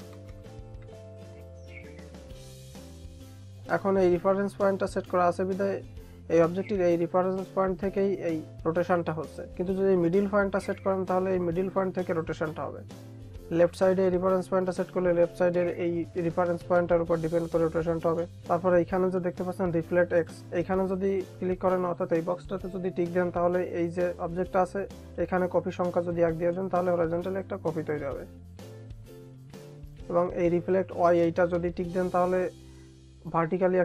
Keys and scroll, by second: 1.5 Tab.